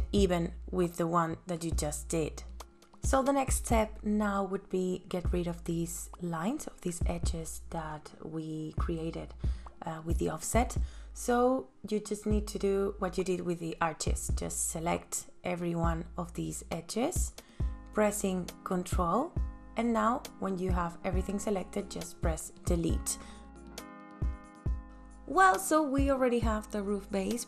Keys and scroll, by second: 1.6 space, 2.9 ctrl+s, 20.7 Delete, 22.2 ctrl+s.